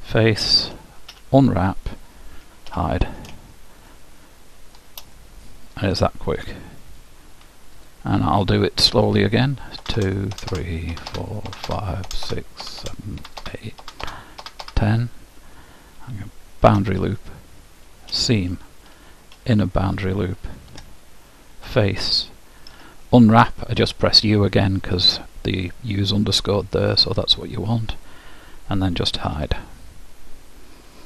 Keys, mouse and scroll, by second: 0.7 u, 2.8 h, 3.9-7.8 middle drag, 7.8-10.1 drag, 16.1-17.8 middle drag, 16.9 shift+', 20.6 ctrl+Tab, 22.8 u, 29.4 h.